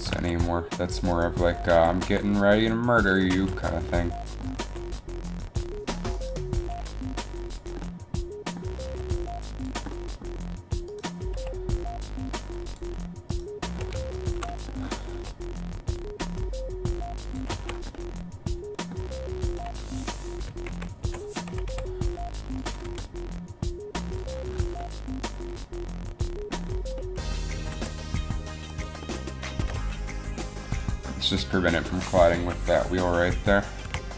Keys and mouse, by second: 0.3 alt+r, 1.9 alt+r, 3.6 alt+r, 4.8 r, 6.9 r, 9.1 r, 9.4 r, 11.5 r, 15.3 r, 17.7 a, 20.8 ctrl+KP_3, 21.8 r, 23.0 g, 27.5 r, 27.5 g, 27.7 g, 29.7 g, 32.5 KP_3, 34.0 a.